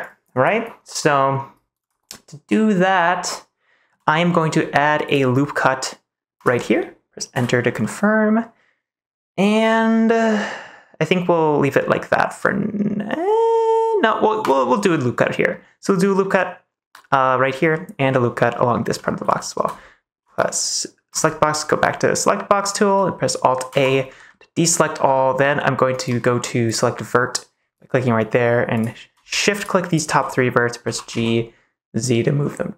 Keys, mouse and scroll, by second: 3.2 shift+middle click, 5.0 click, 6.3 click, 7.3 Return, 7.8-11.7 middle drag, 14.4 click, 15.0 middle click, 17.8 middle click, 19.0 middle click, 22.3 middle click, 23.6 alt+a, 24.2 middle click, 25.3 middle click, 26.6 click, 28.7 click, 30.8 g, 31.0 z.